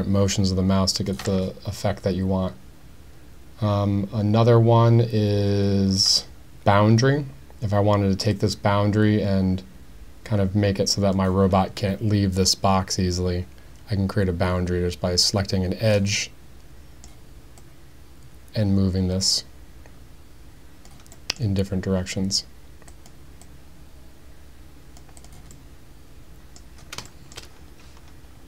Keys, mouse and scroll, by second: 8.3-11.1 drag, 12.5-15.9 drag, 16.2 middle click, 17.6-20.9 drag, 21.2 middle click, 22.9 click, 23.4-25.0 drag, 25.2 click, 25.5-26.6 middle drag, 27.1 shift+middle click.